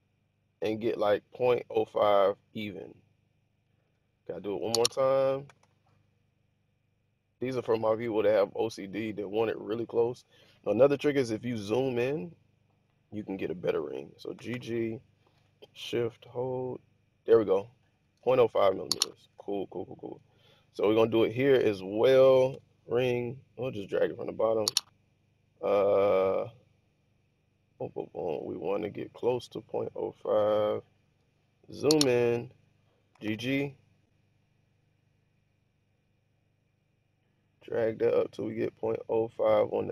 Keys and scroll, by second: 5.3 g, 5.4 g, 9.6 Escape, 14.2 g, 14.4 g, 22.4 ctrl+r, 33.0 g, 33.2 g.